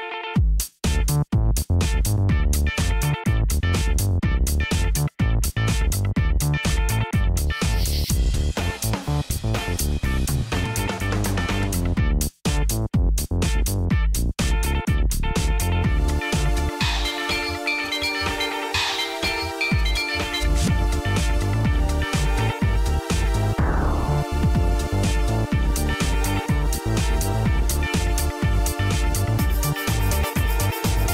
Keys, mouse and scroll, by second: 0.0-0.3 typing, 0.5 Return, 2.5 typing, 9.7 click, 10.7 click, 11.6-13.8 drag, 13.4-15.3 typing, 16.0 Return, 19.3-22.2 typing, 22.9 Return, 24.5-25.4 typing, 26.4-27.1 typing, 29.2 Return.